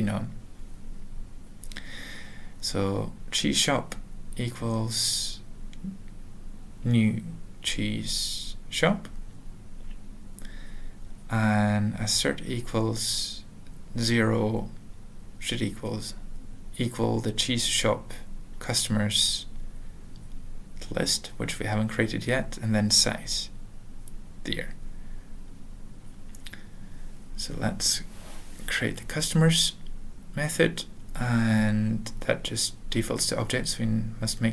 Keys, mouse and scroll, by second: 2.2-9.5 typing, 4.9 Return, 9.3 Return, 9.9 Return, 10.9-15.2 typing, 15.5 alt+/, 16.2 alt+BackSpace, 16.7-19.1 typing, 17.9 Return, 19.8 alt+BackSpace, 20.9-23.7 typing, 25.1 ctrl+a, 25.3 ctrl+s, 26.3 alt+f, 26.5 alt+f, 27.5-28.4 typing, 29.0 alt+Return, 29.4-30.1 typing, 31.4 alt+., 32.9 alt+b, 33.7 alt+d, 34.3-34.5 typing.